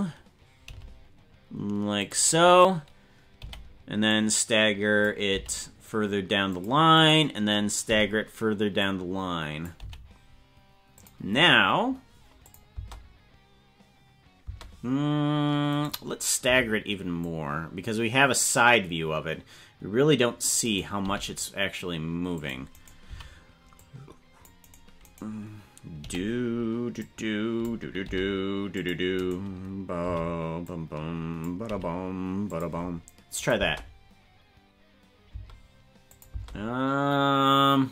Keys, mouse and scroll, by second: 0.6 g, 2.4 right click, 3.4 b, 5.4 g, 7.0 right click, 7.9 b, 9.9 g, 12.5 click, 12.7 space, 14.5 space, 15.7 right click, 16.4 c, 21.1 g, 22.7 right click, 23.1 c, 25.0 right click, 26.0 b, 28.1 g, 29.2 right click, 30.0 b, 33.4 click, 33.6 space, 35.3 space, 36.1 click, 36.3 space.